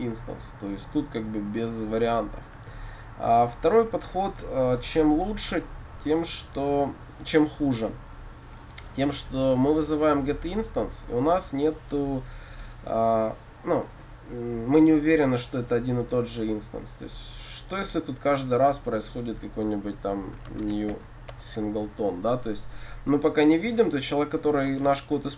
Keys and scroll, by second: 2.1 ctrl+z, 3.7 ctrl+z, 21.4 Return, 24.8 Return.